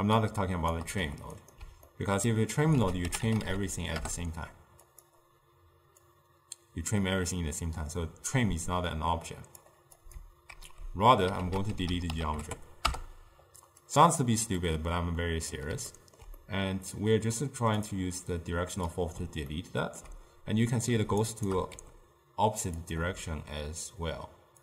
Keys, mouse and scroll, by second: 1.1 g, 2.0 ctrl+middle click, 2.9 ctrl+a, 6.1-9.3 drag, 10.1 click, 10.8 ctrl+x, 11.5 ctrl+a, 14.7-15.9 middle drag, 15.9-16.3 scroll down 1, 16.5-17.9 middle drag, 17.9-19.6 drag, 19.6-21.3 ctrl+middle drag, 21.3 shift+right click, 21.6 scroll down 1, 21.8 g.